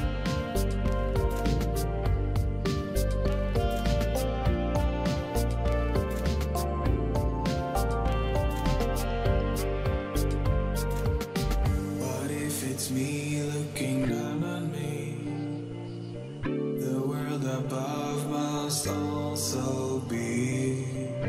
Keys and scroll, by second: 20.1-21.2 typing.